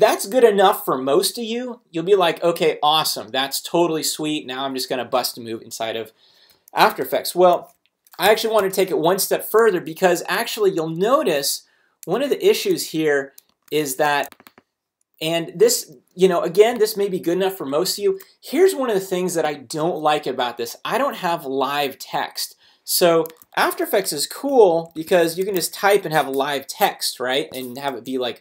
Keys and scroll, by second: 7.5 super+a, 8.2 super+BackSpace, 8.6 Return, 9.6 super+Return, 9.7 super+z, 11.4 super+z, 13.8 shift+super+z, 18.0 shift+super+a, 23.4 super+t, 24.6-26.1 typing, 27.9 super+a.